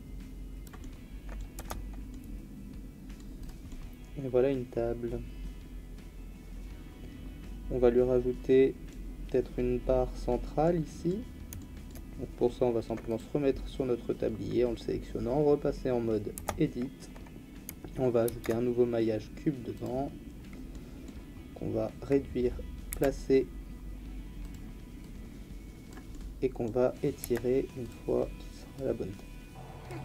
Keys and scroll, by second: 1.6 Tab, 16.4 Tab, 18.3 shift+a, 22.9 s, 27.2 s.